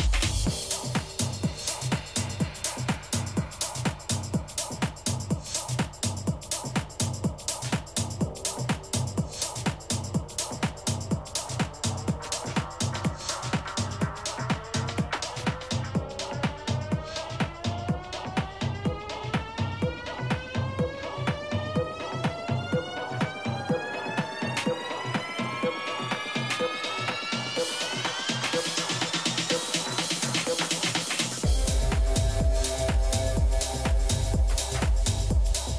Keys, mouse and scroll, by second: 2.2 Tab, 2.8-4.7 typing, 6.5 b, 10.8 g, 15.4-17.7 middle drag, 19.7 KP_3, 20.6 middle click, 22.2-24.1 drag, 28.9 a, 35.4 b.